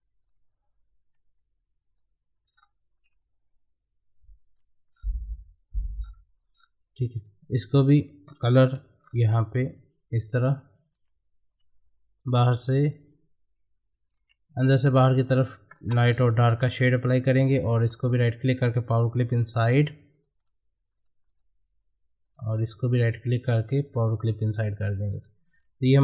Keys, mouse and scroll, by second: 2.5 scroll up 1, 3.0-4.9 drag, 4.9-6.0 scroll down 1, 6.1-6.5 scroll up 1, 6.5-7.2 scroll down 1, 7.2 right click, 7.8 click, 8.2-8.7 scroll up 1, 8.7 g, 9.0 scroll up 1, 9.7 click, 10.4-15.8 ctrl+drag, 15.8 space, 17.4 scroll down 1, 17.8 right click, 18.7 click, 20.4 right click, 20.4 right click, 21.0 click, 22.5 right click, 23.4 click, 24.4-24.9 scroll down 1, 24.9-26.0 drag.